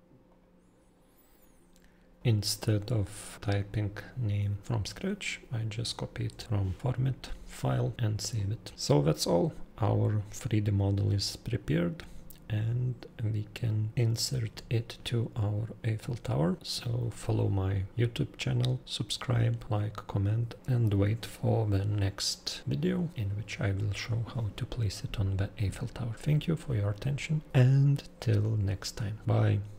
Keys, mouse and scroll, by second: 0.3 click, 6.3 ctrl+v, 6.8 click, 6.8 BackSpace.